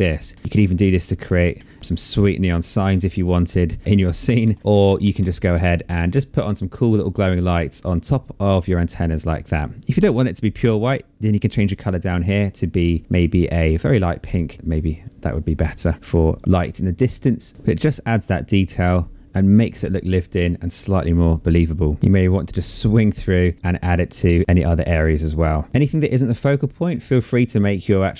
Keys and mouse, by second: 0.9 shift+click, 2.5 shift+click, 3.8 ctrl+shift+z, 4.8 ctrl+z, 7.2 click, 10.7 click, 11.9 click, 13.6 click, 15.9 click, 17.3 click, 18.1 click, 21.7 click, 23.1 click, 24.4 click, 26.2 click.